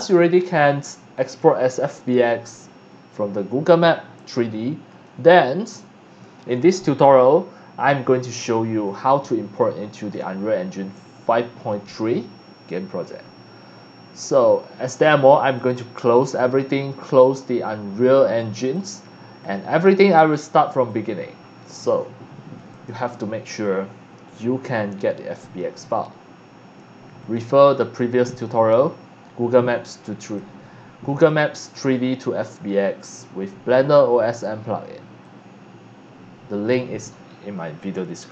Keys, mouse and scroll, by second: 4.9 click, 10.1 scroll down 1, 15.5 click, 17.0 click, 20.9-21.8 drag, 22.7 click, 23.5 click, 27.2 click, 28.3 click, 29.6 click, 31.1 click, 32.5-33.8 drag, 34.3 click, 35.2-36.7 drag.